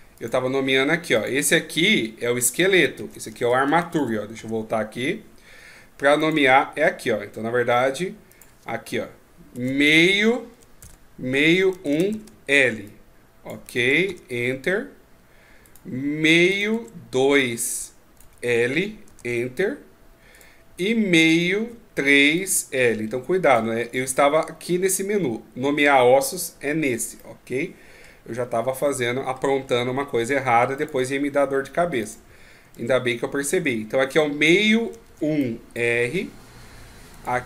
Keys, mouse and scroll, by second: 0.2 click, 1.2 click, 6.2 click, 8.3 click, 15.7 right click, 16.5 click, 20.3 right click, 21.2 click, 27.2 middle click, 28.4-29.0 scroll down 3, 28.8 middle click, 29.6-30.4 scroll up 3, 30.8 right click, 32.0 click.